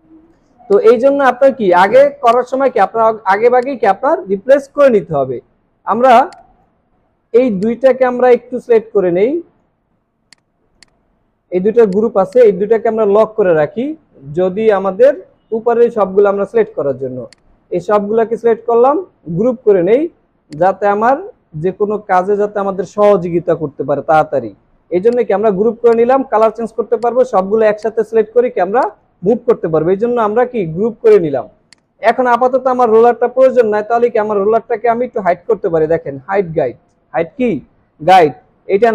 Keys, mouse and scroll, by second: 5.5 alt+scroll up 1, 15.2 ctrl+2, 16.1-16.6 alt+scroll down 1, 19.8 ctrl+g, 30.6 ctrl+z.